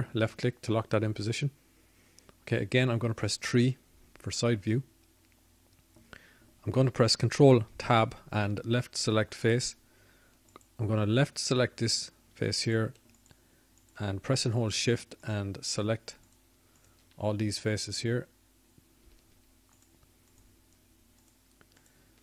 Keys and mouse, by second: 9.1 KP_3, 13.3 ctrl+Tab, 15.2 ctrl+Tab.